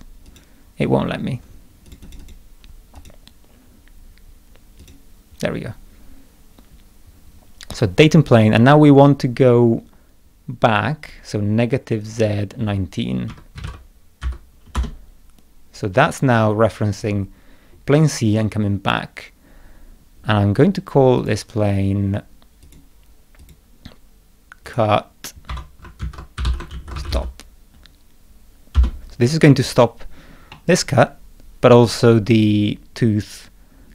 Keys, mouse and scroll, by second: 0.2 click, 1.8 click, 2.0 click, 2.2 click, 2.9 click, 4.8 click, 12.0 click, 14.7 Return, 21.1 click, 22.6 click, 23.4 click, 24.6 click, 25.5 F2, 25.7-27.6 typing, 28.7 Return, 30.5-31.8 middle drag, 30.6-31.8 drag.